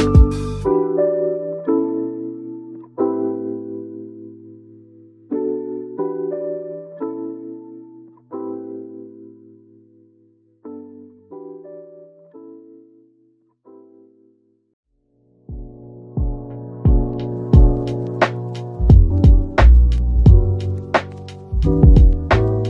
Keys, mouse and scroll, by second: 0.0-2.4 typing, 3.8-5.1 typing, 6.3 shift+click, 6.9 Tab, 7.8 ctrl+b, 8.8 scroll up 1, 9.1 middle click, 11.0 ctrl+z, 12.1 ctrl+b, 13.9-14.5 scroll up 1, 14.5 scroll down 1, 16.0-16.5 scroll up 1, 17.3 Tab, 17.9 middle click, 18.5-19.7 scroll down 1, 19.8 shift+click, 21.1 middle click, 21.9-22.3 scroll down 1, 22.4 a.